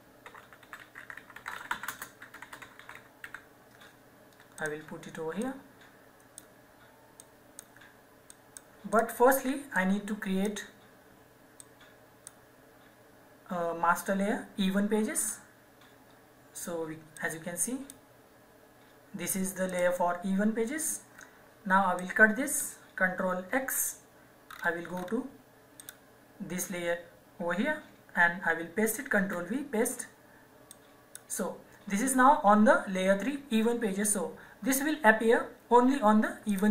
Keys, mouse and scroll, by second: 0.0-3.7 typing, 4.6 click, 15.2 click, 19.9 click, 22.3 click, 23.5 ctrl+x, 24.5-25.8 scroll down 1, 25.8 click, 29.2 v, 30.7 click, 36.4 click.